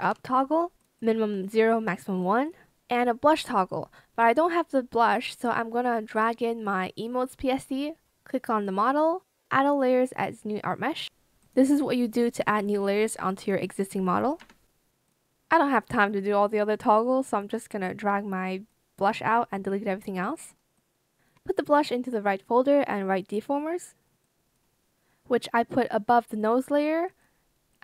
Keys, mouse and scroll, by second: 0.0-1.8 typing, 14.3 BackSpace, 17.4 BackSpace, 17.7 Return, 18.2 shift+click, 20.6 shift+click, 21.4 alt+shift+click, 21.9 shift+click.